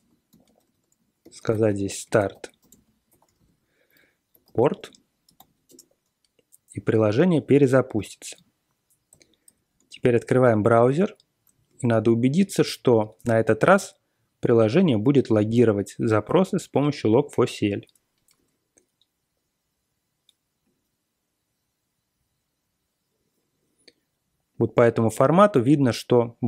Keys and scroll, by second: 0.0-6.1 typing, 9.0 ctrl+l, 9.4 ctrl+l, 10.0 super+Tab, 18.3 Return.